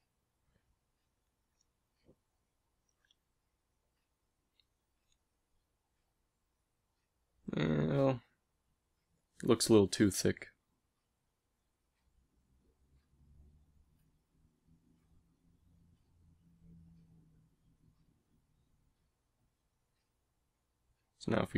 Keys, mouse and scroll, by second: 2.9 a, 7.5 click, 7.7 g, 11.4-13.3 drag, 12.3 g, 20.4 a, 21.3 l.